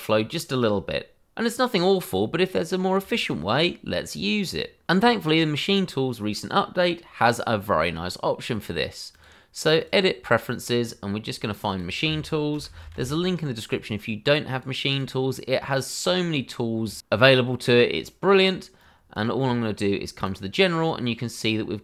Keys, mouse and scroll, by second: 2.4 shift+middle click, 3.5-4.1 scroll up 1, 4.1-4.8 scroll down 1, 9.1 click, 12.5 m, 14.5 click, 15.0 double click, 16.2-17.0 scroll down 1, 18.7 click, 19.3-20.2 scroll up 1, 20.2 click, 20.8-21.8 scroll down 1.